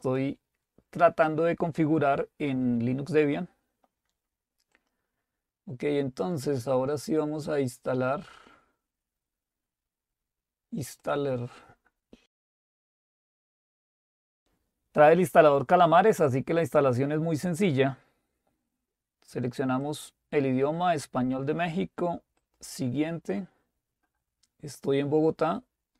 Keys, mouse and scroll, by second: 0.1 click, 5.2 click, 11.1 click, 13.5 click, 14.4 click, 17.6 click, 19.9 click, 22.4 click.